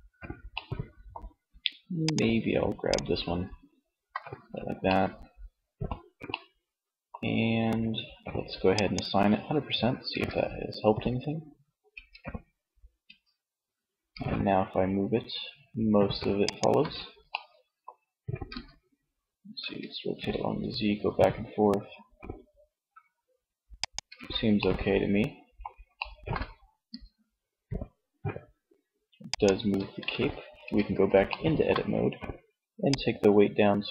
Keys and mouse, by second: 3.1 middle click, 8.4 middle click, 9.1 Tab, 11.0 Tab, 12.0 Tab, 13.3 r, 15.7 click, 15.9 ctrl+z, 16.2-17.2 drag, 17.5 r, 23.1 click, 23.4 ctrl+z, 23.7 middle click, 24.2 middle click, 25.9 r, 28.6 click, 28.7 ctrl+z, 29.8 Tab.